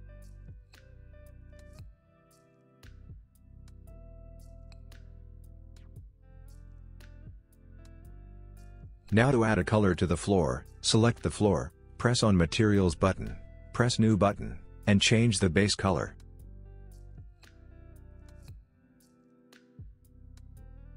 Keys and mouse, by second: 0.8-3.9 drag, 6.1-8.3 drag, 13.5 click, 18.8 click.